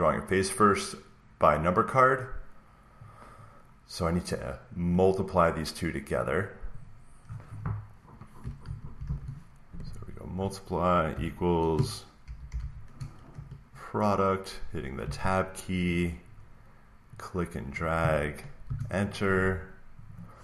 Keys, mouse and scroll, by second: 2.9 click, 4.8 click, 6.7 click, 8.3-9.5 typing, 10.1 click, 10.8-13.3 typing, 12.2 click, 14.9 Tab, 16.2 Tab, 17.7-19.7 drag, 18.6 Return, 20.0-20.4 drag.